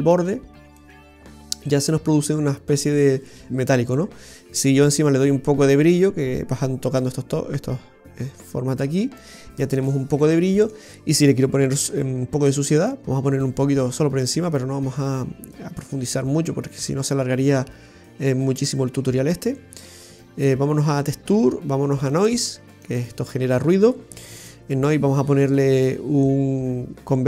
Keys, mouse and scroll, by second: 0.8 middle click, 4.0 click, 9.6-10.8 scroll down 2, 10.0 middle click.